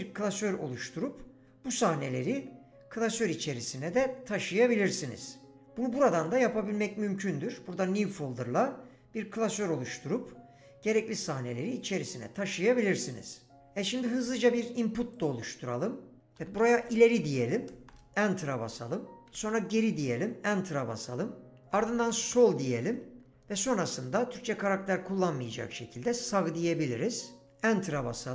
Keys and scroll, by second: 16.2-17.6 typing, 17.9 Return, 19.2 typing, 19.8 Return, 21.5-23.8 typing, 25.7-26.4 typing, 27.4 Return.